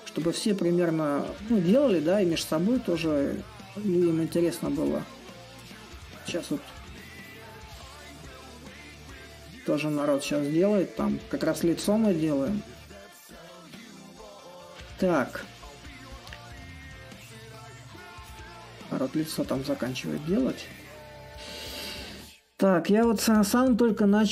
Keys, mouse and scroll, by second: 0.0-6.3 alt+drag, 6.5-14.0 alt+drag, 15.3-19.2 drag, 19.3-24.3 alt+drag.